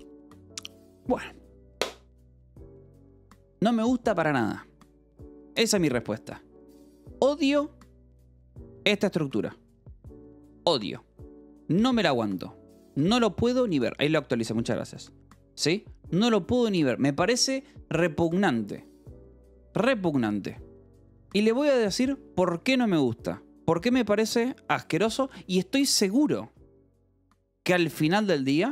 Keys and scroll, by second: 23.1 alt+Tab.